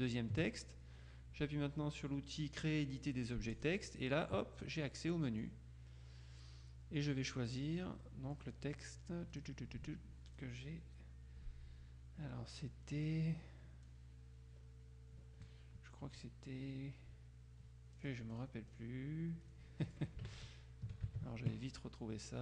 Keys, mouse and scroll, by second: 3.6 click, 5.5-8.4 drag, 8.4-10.0 scroll down 1, 10.4-11.0 scroll down 2, 13.9-14.4 scroll down 2, 18.0-19.3 scroll down 2, 19.5-20.2 scroll down 2, 20.2-20.6 alt+scroll down 1, 20.4 alt+Tab.